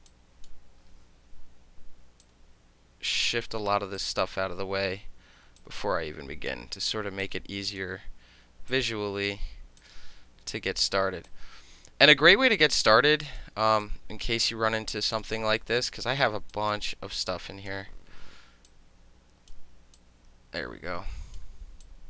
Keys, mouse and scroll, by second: 0.1-0.4 shift+drag, 0.4-2.2 shift+middle drag, 2.2-3.4 drag, 3.4-4.0 middle drag, 4.0 drag, 4.2-5.6 middle drag, 5.6 click, 6.5-7.2 middle drag, 7.2-7.8 drag, 7.8-8.7 middle drag, 8.7-9.3 drag, 9.3-9.8 middle drag, 9.8-10.9 drag, 10.9-11.2 middle drag, 11.2-12.5 drag, 12.5-12.8 middle drag, 12.8-13.4 drag, 13.4-13.8 middle drag, 13.8-15.2 drag, 15.2-15.6 alt+middle drag, 15.8-16.5 alt+middle drag, 16.5 click, 16.7-17.2 middle drag, 17.2-17.7 drag, 17.7-18.7 middle drag, 18.7-19.5 drag, 19.9-21.4 drag, 21.8-22.0 drag.